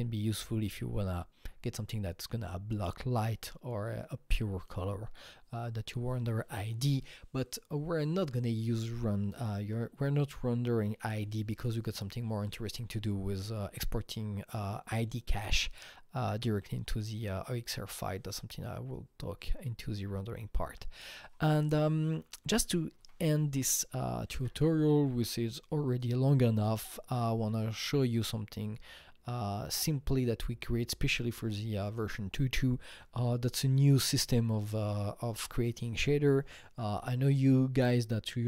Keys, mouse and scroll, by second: 20.6 Right, 21.2 Left, 23.0 Escape, 24.3 alt+Tab, 24.4 Escape, 26.6 alt+middle click, 26.6-27.2 scroll, 29.9-36.1 drag, 29.9-30.2 alt+scroll, 33.8 Delete, 38.2 Delete, 38.2-38.4 drag, 38.2-38.4 alt+scroll.